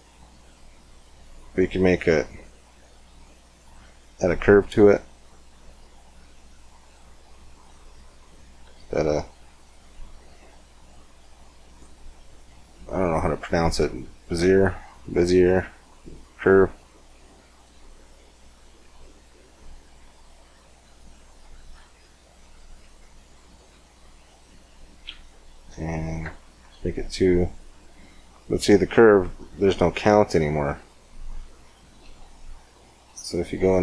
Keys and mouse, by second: 2.1-3.9 drag, 4.6 shift+a, 7.7 click, 8.1 click, 8.5 g, 11.6 middle click, 14.4-15.9 middle drag, 15.9-17.7 right drag, 17.3-30.6 drag, 30.6-32.4 middle drag.